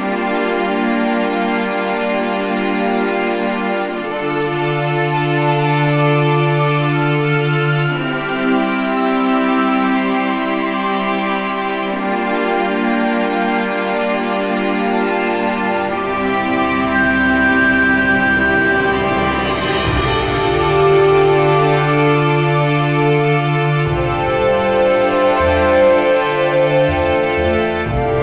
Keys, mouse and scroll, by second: 1.1 alt+middle click, 1.7 click, 2.3 4, 2.5 click, 2.5 KP_4, 3.1-4.6 middle drag, 5.5-7.0 alt+middle drag, 9.2-11.5 drag, 12.5 middle click, 14.8-17.1 drag, 17.8 alt+middle click, 18.9 middle click, 19.5 click, 20.1 shift+click, 20.8 ctrl+k, 21.1 click, 21.4-23.5 scroll, 23.6 click, 23.8 right click, 24.6 click, 27.0 right click, 28.0 click.